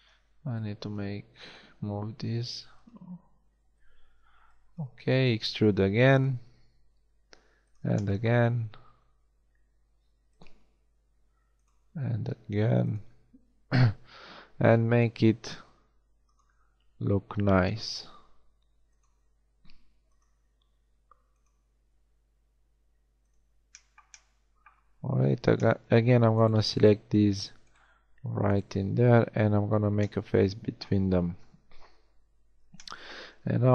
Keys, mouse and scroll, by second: 0.3 b, 2.0 g, 3.2 a, 4.3 b, 5.0 e, 6.5 e, 8.9 e, 10.5 e, 11.7 e, 13.0 e, 15.1 e, 16.5 e, 17.9 e, 19.1 e, 20.3 e, 21.7 e, 24.2 middle click, 24.5 middle click, 29.5 f, 31.4 KP_1, 33.3 a.